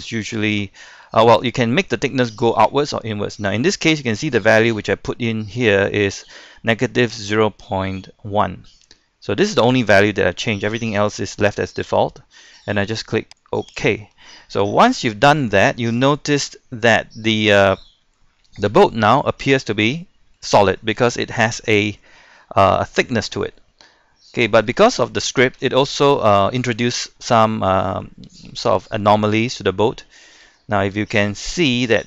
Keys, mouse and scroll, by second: 14.8 scroll up 1, 16.1 shift+middle click, 17.7-18.7 scroll up 1, 18.7 Tab, 19.2-24.7 middle drag, 24.8 shift+middle click, 25.3-25.6 scroll up 1, 25.6 shift+middle click, 26.2-27.1 scroll up 1, 27.1 scroll down 1, 27.3 middle click, 29.7-30.5 scroll down 1, 30.5 Tab, 31.6 middle click.